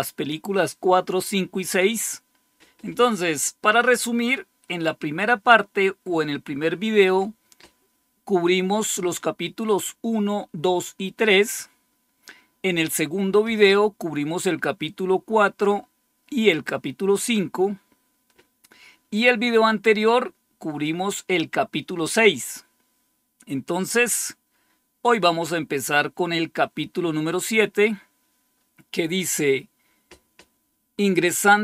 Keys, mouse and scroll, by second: 1.9-2.6 scroll down 1, 8.1-9.0 scroll down 2, 9.6-11.4 scroll down 4, 15.1-16.7 scroll down 2, 17.6-22.0 scroll down 2, 24.2-31.6 scroll down 3.